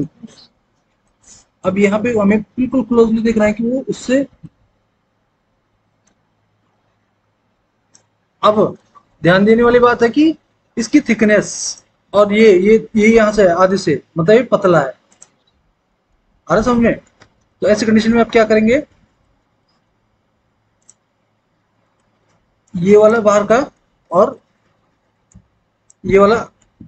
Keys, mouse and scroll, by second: 16.3 alt+w, 17.1 alt+w, 26.5 alt+w.